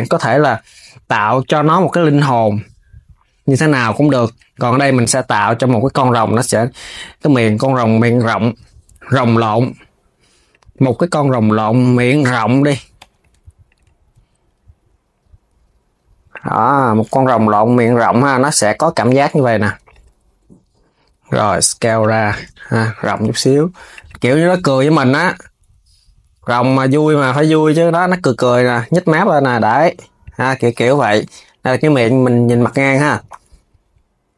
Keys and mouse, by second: 1.1 click, 1.7 e, 4.4 click, 6.0 g, 8.8 click, 11.3 g, 13.4 click, 18.2 KP_3, 19.6 click, 20.8 s, 22.1 g, 24.9 click, 30.6 Tab, 32.5 Tab, 32.7 click, 33.1 g.